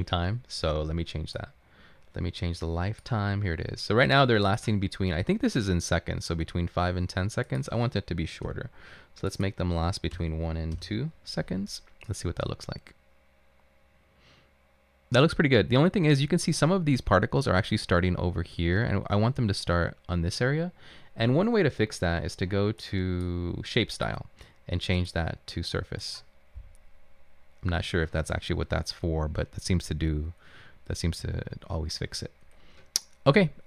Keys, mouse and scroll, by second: 9.9-10.7 typing, 10.8 Return, 15.4 typing.